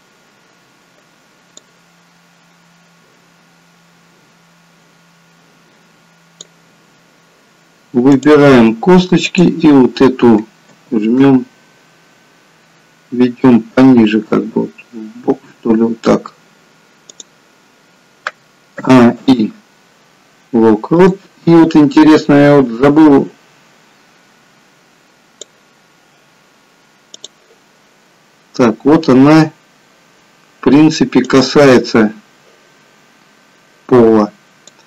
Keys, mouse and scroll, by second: 1.8 click, 8.1 click, 9.3 click, 10.8 g, 18.8 a, 19.2 i, 22.5 click, 27.5 click, 31.2 click.